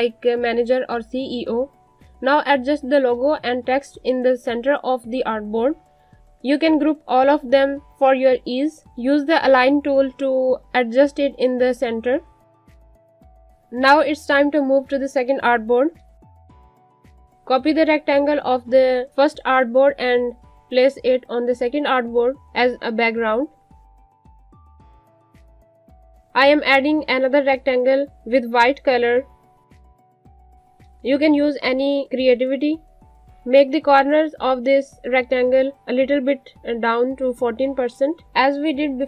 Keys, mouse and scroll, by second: 0.0 click, 2.6 Up, 4.1 ctrl+z, 4.6 click, 7.1 shift+click, 8.0 click, 12.6 space, 12.8 click, 13.6 space, 13.7 click, 14.6-15.6 scroll down 3, 15.6 space, 15.7 click, 16.2 space, 18.5 alt+click, 22.0 click, 26.2 click.